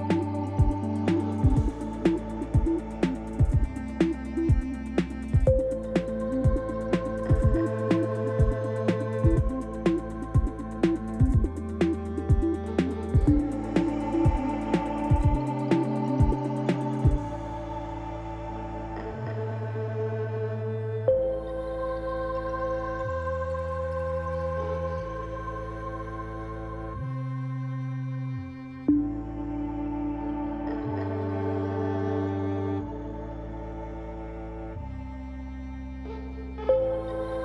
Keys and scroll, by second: 2.7 shift+z, 5.2 shift+z, 17.6 i, 26.5 i.